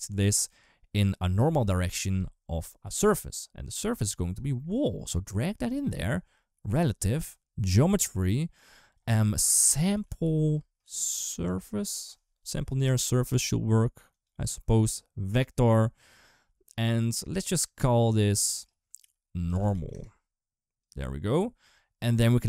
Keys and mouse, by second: 4.3 click, 6.4 click, 7.7 click, 7.9-14.0 drag, 14.7 click, 18.1-20.7 drag, 21.8 click.